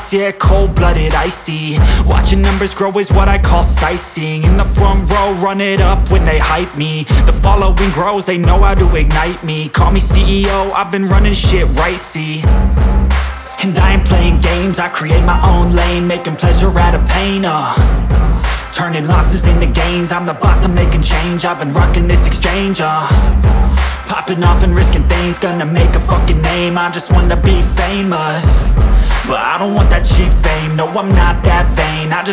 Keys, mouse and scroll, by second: 1.2 click, 4.9 click, 14.2 click, 20.3 click, 26.7 click, 30.3 click.